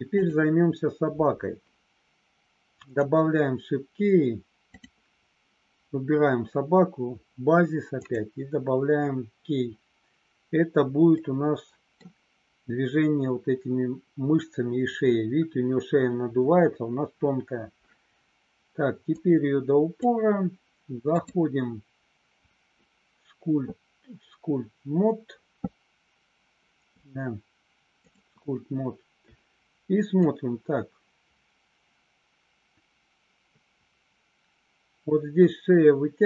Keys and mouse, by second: 0.1 click, 2.7 click, 8.0 click, 11.1 middle click, 19.2 click, 21.2-28.2 drag, 30.2-36.2 drag.